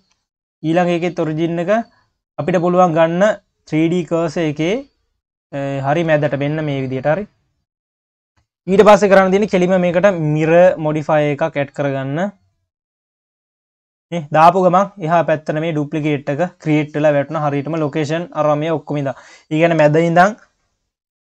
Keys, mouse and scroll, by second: 0.3-1.0 scroll up 2, 1.0 click, 2.3 click, 3.6-6.2 drag, 6.2 ctrl+s, 7.0 click, 7.7 click, 8.9 KP_1, 10.7-13.7 drag, 13.9-14.3 scroll up 2, 14.3 q, 15.6 scroll up 1, 15.8 q, 17.0-17.8 scroll up 1, 17.8 q, 18.5-19.8 scroll down 4, 19.8 KP_1, 20.7-21.2 scroll up 1.